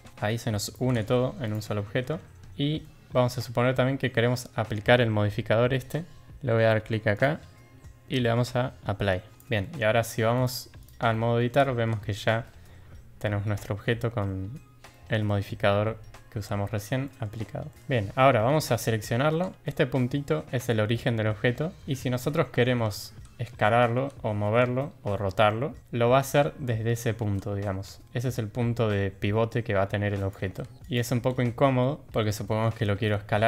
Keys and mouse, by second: 0.1 drag, 0.9 g, 2.2 ctrl+z, 2.3 Tab, 2.8 middle click, 4.2 middle click, 5.0 Tab, 7.1-9.3 drag, 9.3 Tab, 9.6-10.0 middle drag, 11.1-11.5 middle drag, 11.6 Tab, 12.4-13.8 middle drag, 14.9 middle drag, 17.0 middle click, 17.7 shift+middle click, 17.7 Tab, 18.2 shift+drag, 18.7 click, 25.4-25.7 shift+middle drag, 27.8 s, 30.6 ctrl+z, 30.8 r, 31.3 ctrl+z, 32.0 click, 32.4 shift+drag, 33.1 s.